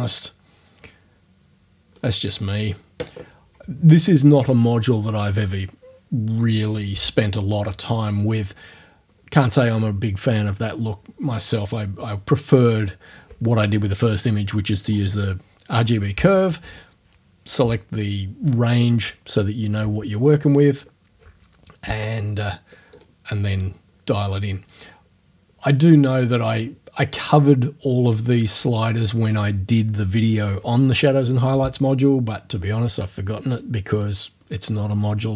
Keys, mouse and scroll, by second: 22.9 click.